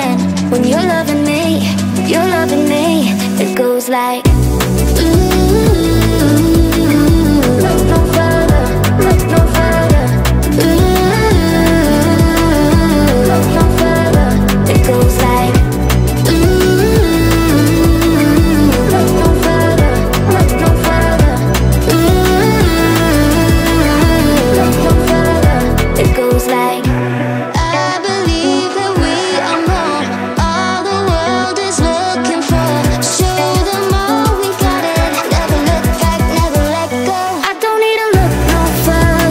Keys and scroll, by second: 7.3-10.5 typing, 9.3 Caps_Lock, 17.3 2, 17.9 Return, 19.7-20.8 typing.